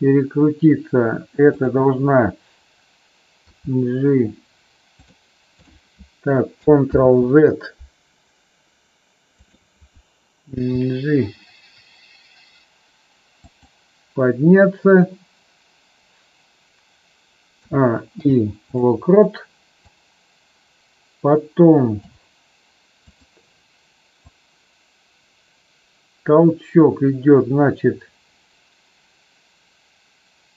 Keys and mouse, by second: 1.5 click, 3.3 g, 6.8 ctrl+z, 9.3 click, 10.5 g, 18.1 i, 19.9 click, 23.1 click, 24.3-30.5 drag.